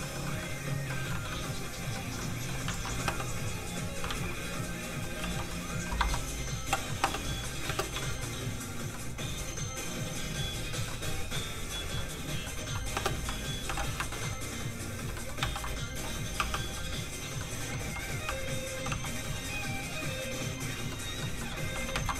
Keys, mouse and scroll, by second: 0.0 shift+middle click, 0.2 middle click, 0.3 middle click, 2.2 shift+middle click, 2.7 alt+shift+z, 4.0 space, 4.1 alt+shift+z, 4.3 click, 5.2 g, 6.0 Escape, 6.6 h, 6.9 middle click, 7.0 space, 7.6 space, 8.0 shift+middle click, 8.2-8.9 scroll up 1, 9.0 middle click, 11.1 scroll down 1, 11.3 middle click, 11.7 shift+middle click, 12.0 shift+middle click, 13.0 space, 13.7 alt+h, 14.1 shift+middle click, 15.0 click, 15.1 shift+middle click, 15.4 shift+d, 16.2 click, 16.4 r, 17.2 click, 17.4 middle click, 17.8 g, 18.1 click, 18.2 r, 18.6 click, 18.9 g, 19.1 click, 20.9 middle click, 21.6 g, 21.9 shift+z.